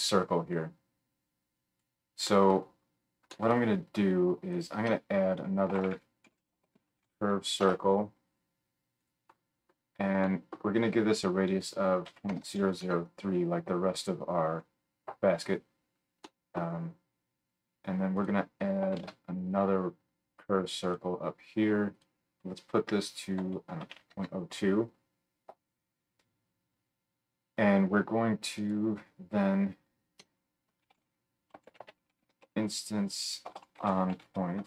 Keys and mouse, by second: 4.5-11.1 drag, 4.9 F3, 12.4 KP_0, 18.2 click, 18.9 shift+d, 21.9-28.8 middle drag, 30.2 F3.